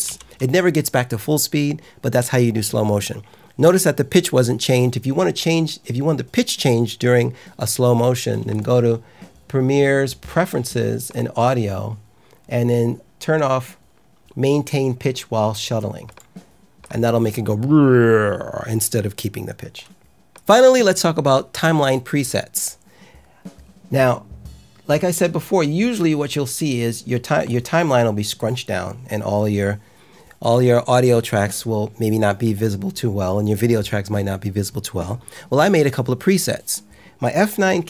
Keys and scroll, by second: 0.0 k.